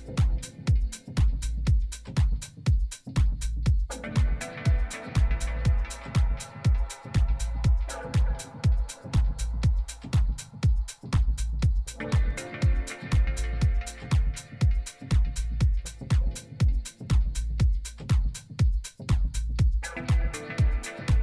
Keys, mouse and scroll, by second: 1.5 Tab, 2.7-5.4 typing, 9.3-11.1 drag, 10.7 z, 11.1-13.4 middle drag, 13.4 KP_3, 14.8-16.2 middle drag, 18.0 s, 19.9 g.